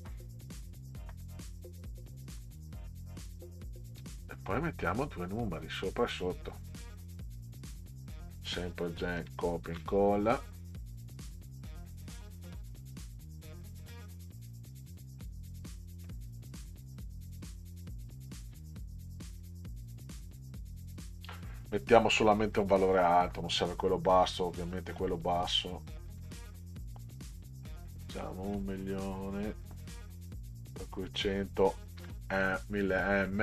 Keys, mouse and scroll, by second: 1.5-2.1 ctrl+scroll up 4, 4.5-4.8 middle drag, 7.4 click, 9.2 ctrl+c, 9.7 ctrl+v, 12.5 click, 12.7 click, 16.1-17.8 drag, 26.2 1, 27.8 0, 28.8 0, 32.0 m.